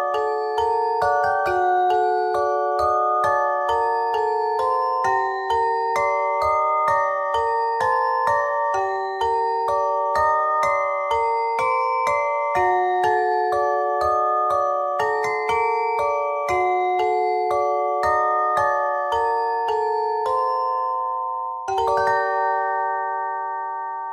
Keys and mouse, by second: 0.1 c, 0.6-2.0 drag, 2.5 c, 4.7-5.9 drag, 6.9-9.3 drag, 10.2 s, 11.3-13.0 drag, 13.5 s, 14.4-15.8 drag, 21.0 w, 22.5 z, 23.8 Tab.